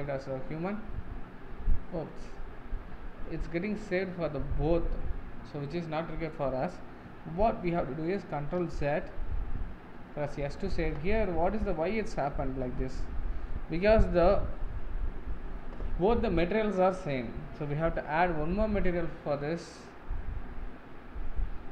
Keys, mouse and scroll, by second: 0.0 ctrl+space, 9.1 ctrl+z, 10.8 ctrl+s.